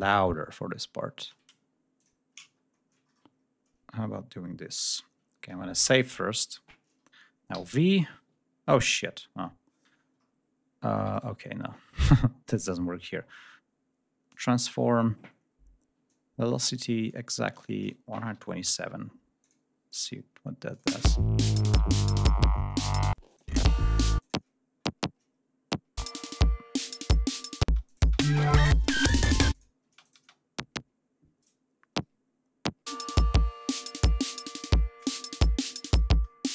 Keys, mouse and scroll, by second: 0.4-0.8 ctrl+scroll up 2, 1.9 shift+click, 2.4-3.1 ctrl+shift+scroll down 4, 3.3-3.8 ctrl+scroll up 2, 5.7 ctrl+s, 7.4 v, 10.1 ctrl+scroll down 2, 18.2 1, 18.2 2, 18.6 7, 19.3 click, 20.6 click, 20.8 space, 23.0 space, 23.2 click, 24.1 click, 25.9 click, 27.5 space, 27.8 click, 29.4 click, 29.8 space, 29.9 click, 32.8 click, 33.9 scroll down 1, 35.4 ctrl+scroll up 2.